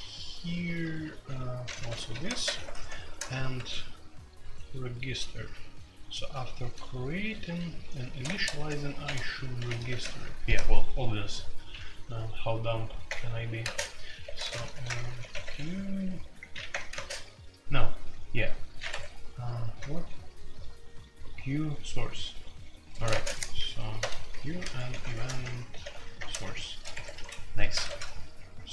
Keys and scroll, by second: 1.0-1.7 typing, 1.9 Escape, 2.1 F2, 2.4 ctrl+c, 2.5 ctrl+c, 3.6 ctrl+d, 5.5 ctrl+d, 7.0-10.0 typing, 13.0 Return, 13.6-15.4 typing, 16.7 Return, 16.9 space, 18.7-19.9 typing, 22.9-28.7 typing, 26.9 Escape, 27.0 F2.